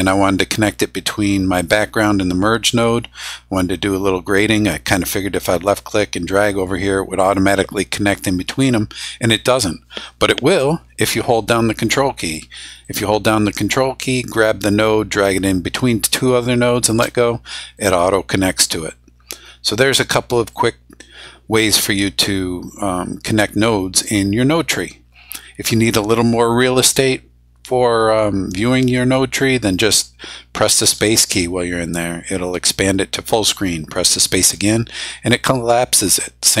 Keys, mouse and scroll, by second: 12.8-17.0 ctrl+drag, 17.7-20.7 drag, 30.8 space, 34.3 space.